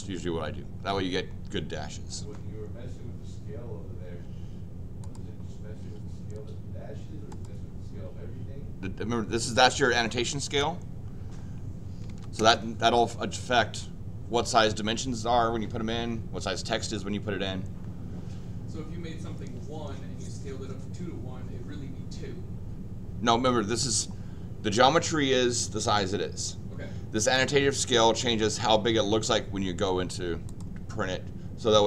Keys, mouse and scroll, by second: 5.0 click, 6.5 middle click, 6.5 scroll up 2, 7.3 click, 11.8-12.6 typing, 30.4 click.